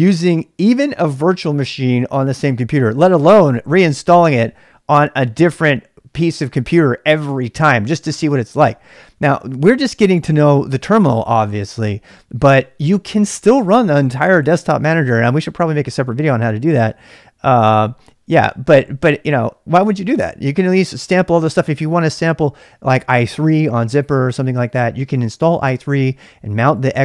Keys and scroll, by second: 0.0-27.0 typing.